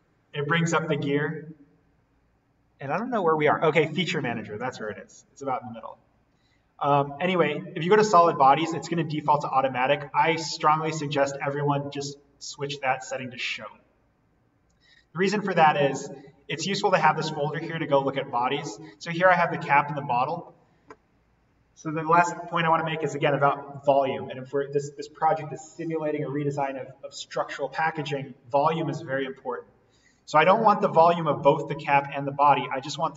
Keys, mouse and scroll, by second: 9.3 click, 13.0 click, 30.3 click.